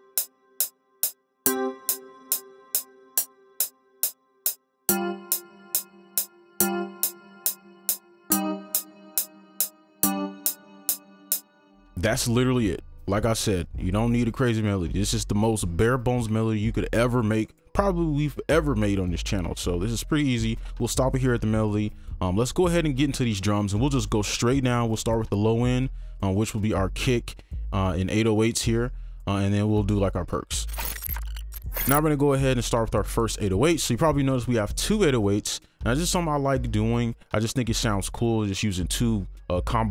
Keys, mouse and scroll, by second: 9.7 ctrl+click, 10.9 ctrl+q, 10.9 right click.